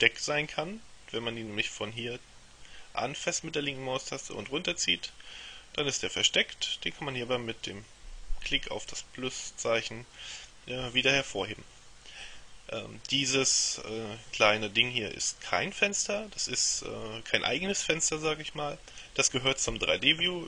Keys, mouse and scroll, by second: 2.1-5.1 drag, 9.0 click.